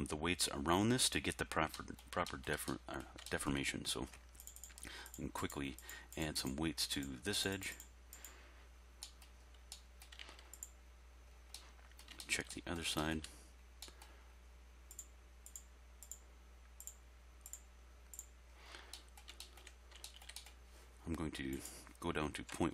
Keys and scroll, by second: 22.5 ..